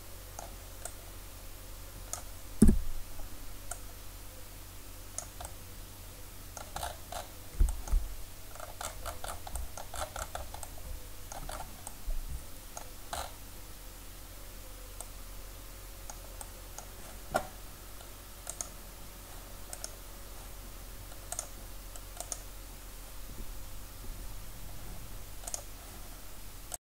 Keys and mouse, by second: 0.9-2.6 drag, 2.6 KP_1, 5.2 drag, 5.5-7.5 middle drag, 18.5-21.2 drag, 21.2-25.5 right drag, 21.3-25.5 drag.